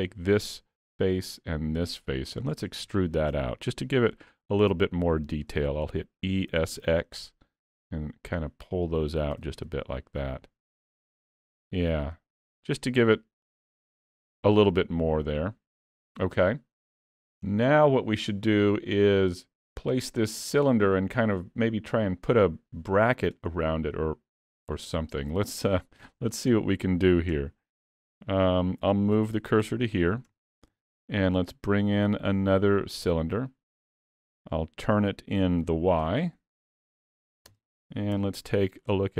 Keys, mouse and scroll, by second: 0.4 middle click, 1.8 shift+click, 2.2 middle click, 2.7 scroll up 3, 3.0 shift+middle click, 4.5 middle click, 6.3 e, 9.5 alt+a, 9.6 Tab, 10.2 middle click, 10.9-11.2 scroll down 3, 11.3 alt+a, 11.7 middle click, 17.1-17.4 scroll down 3, 17.5 shift+middle click, 24.0 middle click, 25.0 scroll up 2, 25.3 middle click, 25.9 shift+middle click, 26.3-26.6 scroll down 2, 26.6 middle click, 27.4 Tab, 28.2 3, 28.4 click, 29.3 shift+s, 30.3 Tab, 30.9 shift+a, 33.5 middle click, 36.0 r, 38.2 KP_3, 39.0 scroll up 3.